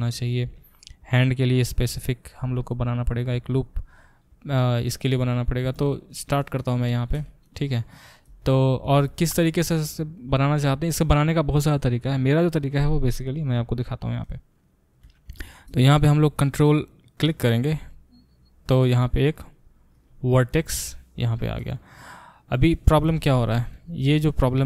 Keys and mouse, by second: 16.7 ctrl+right click, 17.0-24.6 ctrl+middle drag, 20.6 g, 22.9 Escape, 23.8 ctrl+z.